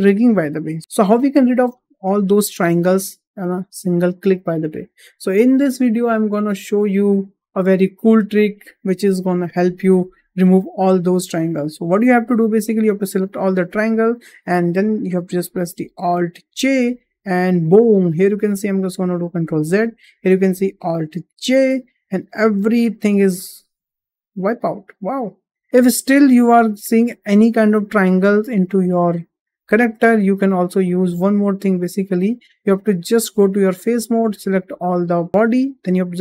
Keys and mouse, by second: 0.8 `, 13.5 a, 16.4 alt+j, 19.3 ctrl+z, 21.3 alt+j, 23.2 click, 23.8-25.4 middle drag, 26.0 shift+middle click, 26.9 shift+middle click, 28.2-29.4 middle drag, 30.0 shift+middle drag, 30.7 middle click, 31.3 shift+middle click, 33.5 click, 34.6 a.